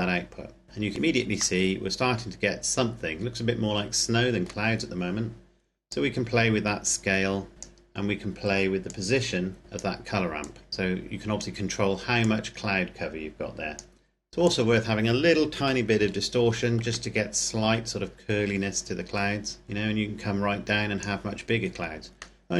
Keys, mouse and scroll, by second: 0.0 click, 0.6-1.5 scroll down 1, 1.5 middle click, 5.7 click, 9.1 click, 10.6 click, 12.4 click, 15.4 KP_Decimal, 15.8 KP_0, 16.3 KP_5, 16.7 KP_Enter, 18.6-19.6 scroll down 1, 19.6 click, 21.4-22.3 scroll down 1, 22.3 middle click.